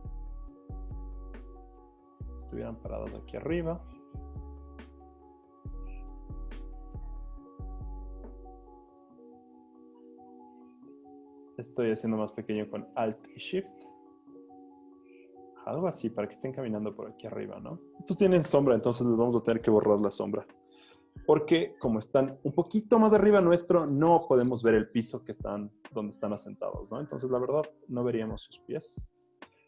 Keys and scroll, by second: 18.6 Return, 21.4 z, 25.7 z, 26.2 v.